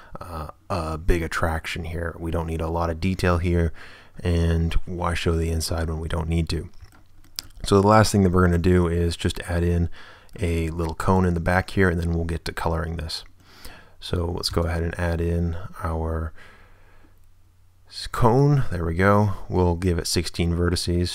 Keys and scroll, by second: 14.5 space.